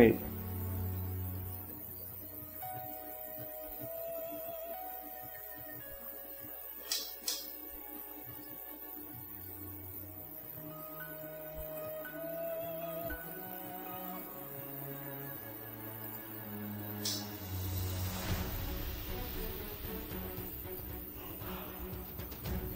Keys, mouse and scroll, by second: 0.8 shift+middle click, 1.6 shift+click, 1.8 shift+middle click, 2.2 ctrl+click, 3.9 shift+click, 4.2 shift+middle click, 6.2 middle click, 6.5 middle click, 7.6 middle click, 8.0 middle click, 11.6 right click, 14.1 click, 16.0 click, 17.8 click, 19.3 click, 20.4 click, 22.0 middle click.